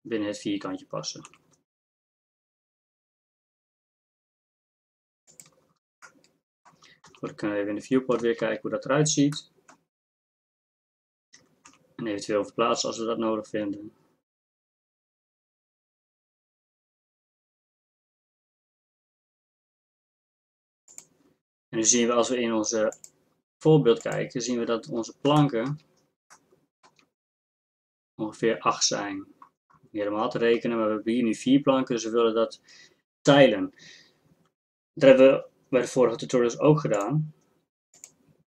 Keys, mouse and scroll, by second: 1.3 s, 7.1 shift+z, 8.2 shift+z, 11.8 g, 38.4 click.